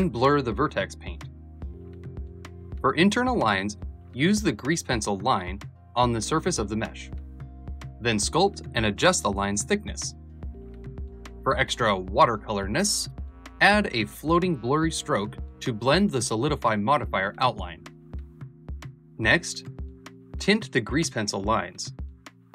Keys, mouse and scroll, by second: 2.0-4.3 drag, 4.3 ctrl+space, 5.4 f, 6.4-10.5 shift+drag, 10.5 ctrl+z, 11.3 click, 13.1 alt+Left, 14.4 alt+Left, 14.6-16.3 alt+drag, 16.3 ctrl+space, 19.0-22.5 drag.